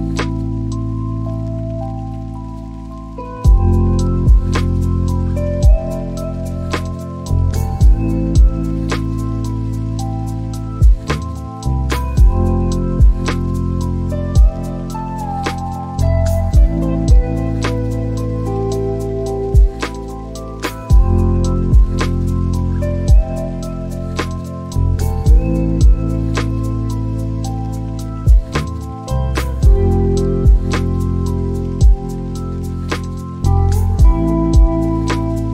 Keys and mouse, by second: 0.2 click, 0.5 shift+a, 6.4 click, 16.4 shift+middle click, 18.6 click, 20.3 click, 25.6 click, 29.3 click.